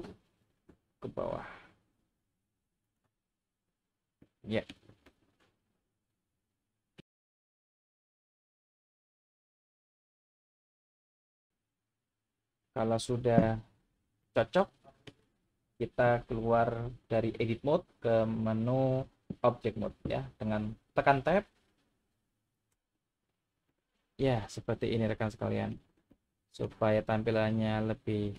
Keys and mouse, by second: 0.3 e, 2.8 click, 4.3-4.7 shift+middle drag, 5.1-7.0 middle drag, 8.6 shift+middle click, 9.4 middle click, 10.2 shift+middle click, 11.0-12.8 middle drag, 14.2 middle click, 22.7 Tab, 23.9-25.7 middle drag, 26.1-26.6 shift+middle drag, 27.1-28.3 middle drag.